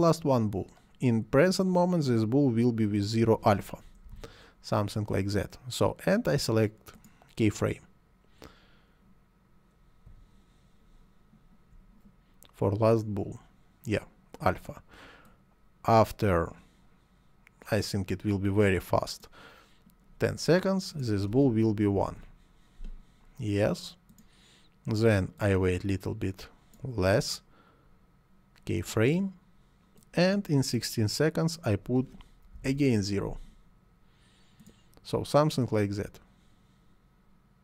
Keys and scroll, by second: 4.0 0, 5.0 Return, 21.9 1, 22.0 Return, 32.4 0, 32.6 Return.